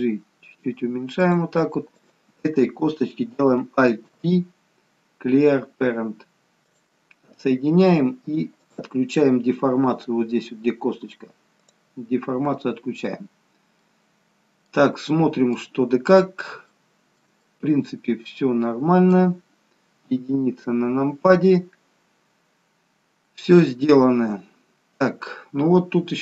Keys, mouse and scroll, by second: 1.9 click, 3.9 alt+p, 7.3-8.6 scroll down 2, 8.6 click, 11.6 click, 13.3-13.9 scroll down 1, 13.9 middle click, 16.1-16.8 scroll down 3, 16.8 shift+middle click, 17.5 middle click, 20.1 KP_1, 23.0 scroll up 1, 25.3 middle click.